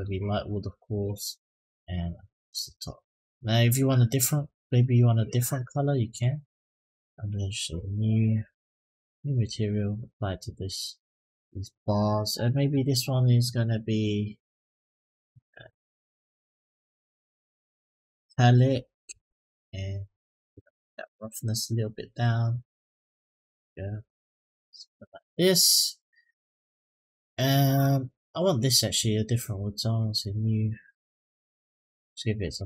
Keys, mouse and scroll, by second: 0.6 click, 2.2 click, 4.1 click, 5.9 click, 7.5-8.9 drag, 9.1 click, 12.1 click, 18.0-19.0 drag, 20.5-24.3 drag, 27.5 click, 29.3 click, 30.0 click, 31.2 click.